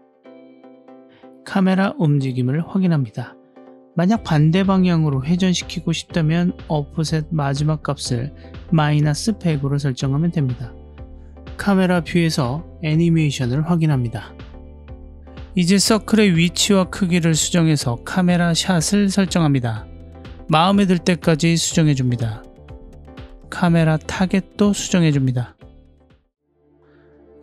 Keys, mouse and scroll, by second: 0.7 KP_0, 2.1 click, 3.0-4.9 drag, 5.4-6.9 drag, 6.6 KP_0, 8.1 click, 8.3 click, 9.1-11.1 drag, 11.1 l, 12.4 click, 13.4 ctrl+alt+q, 14.3 g, 16.6 click, 16.9 s, 19.4-19.8 drag, 19.8-21.2 scroll down 1, 21.2 scroll down 1, 23.3 click, 24.8 g, 26.0-27.0 drag.